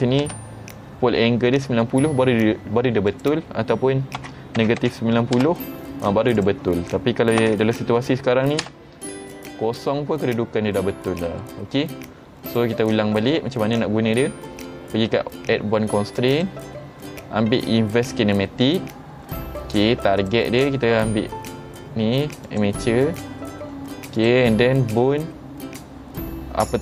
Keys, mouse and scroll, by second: 3.2 click, 6.4 click, 11.0 middle click, 12.5 click, 16.4 click, 18.7 click, 20.3 click, 22.5 click, 24.2 click.